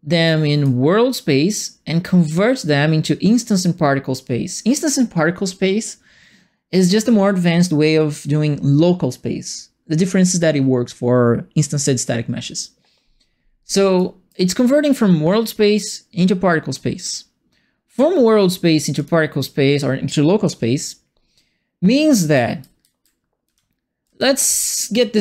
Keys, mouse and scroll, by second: 0.2 right click, 13.9 right click, 18.9 click, 21.9-24.1 typing, 21.9-25.2 right drag.